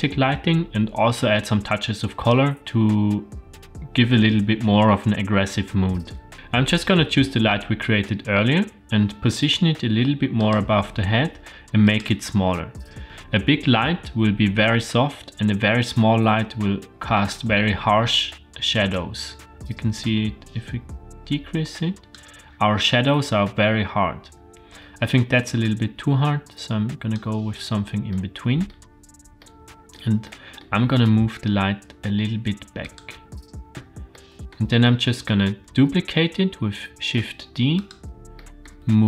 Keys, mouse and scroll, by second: 9.5 g, 11.9 click, 18.9-22.2 drag, 25.6-27.2 drag, 28.1-28.7 middle drag, 29.4-29.9 middle drag, 30.2-30.6 middle drag, 30.8 g, 34.1-34.6 middle drag, 34.8-35.3 middle drag, 35.8 shift+d, 38.4 middle click, 38.9 r.